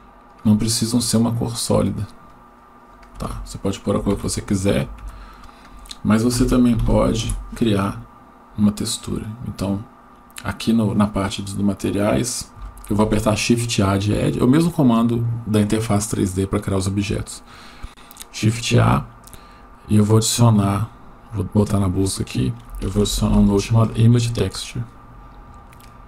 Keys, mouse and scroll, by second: 0.3 click, 5.0 shift+a, 13.0 shift+a.